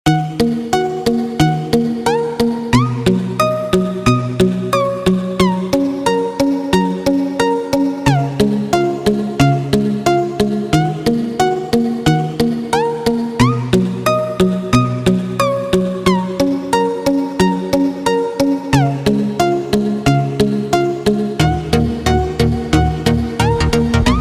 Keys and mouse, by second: 0.2 n, 3.6 click, 6.3 click, 13.8-17.5 middle drag, 19.9 drag, 21.5 n, 22.9-24.2 drag.